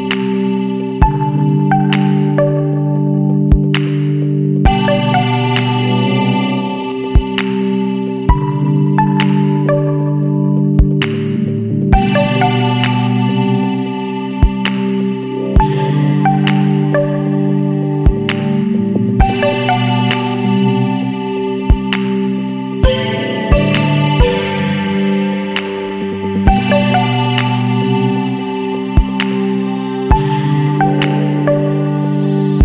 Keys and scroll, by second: 7.4 ctrl+t, 22.4 ctrl+j, 24.9 ctrl+t, 32.1 Down.